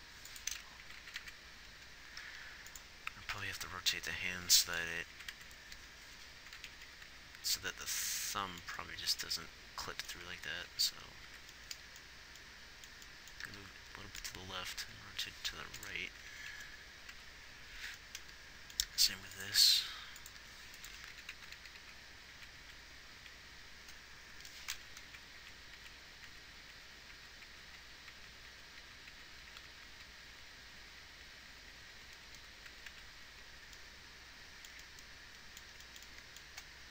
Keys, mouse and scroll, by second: 1.1-1.6 Right, 5.5 Right, 5.8 Right, 7.0 Left, 7.2 Left, 7.5 Left, 9.8 Right, 10.6 Right, 11.1 Left, 11.6 Right, 14.0 g, 15.1 r, 16.5 Left, 17.5 Right, 18.1 Left, 19.3 g, 20.0 r, 20.8 g, 21.4-21.9 Left, 22.2 Left, 22.6 Right, 23.0 Right, 23.6 Right, 25.5 Right, 25.7 Right, 26.1 Right, 26.6 Right, 27.1 Right, 27.5 Right, 28.1 Right, 28.5 Right, 28.9 Right, 29.1 Right, 29.9 Right, 29.9-32.5 Left, 32.8 Left, 33.1 Right, 33.3 Right.